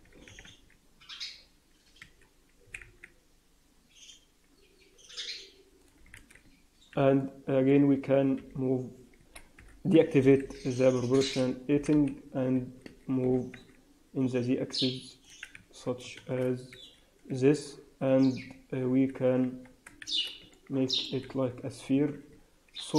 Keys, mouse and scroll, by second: 0.2 s, 2.6 s, 6.0 alt+a, 6.8 b, 8.3 g, 9.5 o, 10.1 g, 11.6 g, 13.2 g.